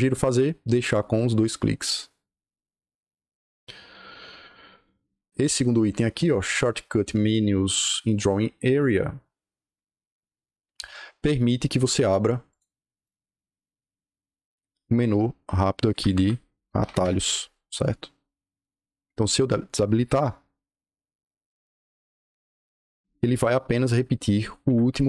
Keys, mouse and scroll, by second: 1.0 click, 12.4 click, 12.7 scroll up 2, 12.9 right click, 13.6-14.1 scroll up 2, 15.8 Escape, 16.4-17.2 typing, 18.5 click, 19.2 click, 20.1 right click, 22.5 Escape, 24.5 Escape.